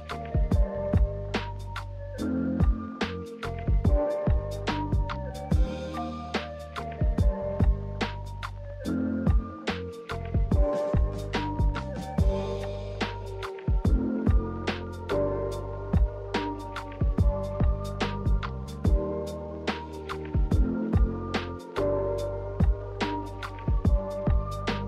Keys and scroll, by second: 13.5 v.